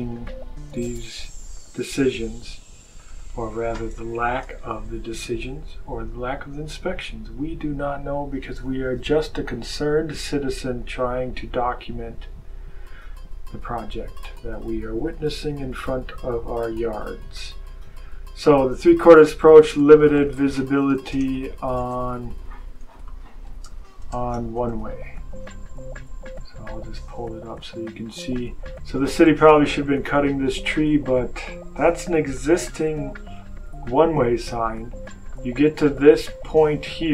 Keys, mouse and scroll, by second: 1.4 click, 2.9 click, 3.9 BackSpace, 19.2-25.8 typing, 27.5 click.